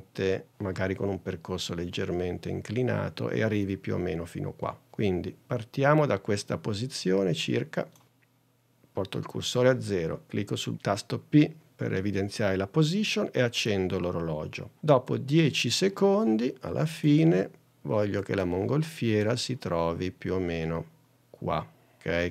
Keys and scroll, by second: 10.7 p.